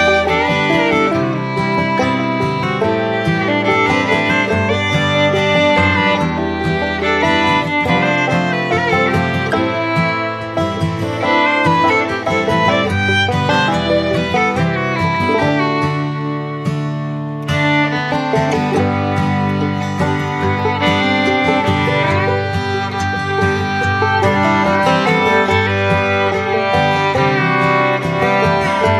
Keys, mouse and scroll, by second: 20.6 ctrl+click, 22.0 ctrl+click, 22.5 ctrl+z, 23.0 ctrl+z, 23.8 ctrl+i, 25.1 ctrl+click.